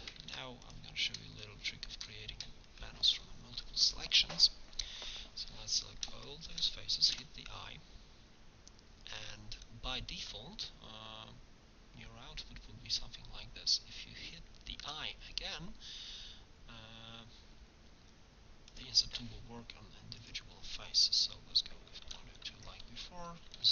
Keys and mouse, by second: 0.2 ctrl+Tab, 4.6-6.4 middle drag, 7.2 i, 9.1 middle click, 20.2-22.3 drag.